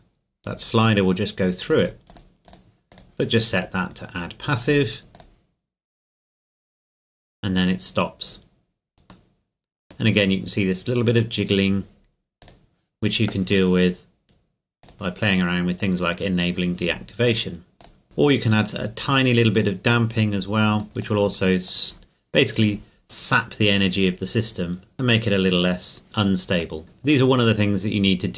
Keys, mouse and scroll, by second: 1.7 click, 2.9 right click, 4.6 click, 5.6 scroll up 1, 9.3 middle click, 12.4 right click, 14.8 click, 14.9 click, 19.6 click, 25.0 click, 26.9-28.1 scroll up 2, 28.1-28.3 scroll down 2.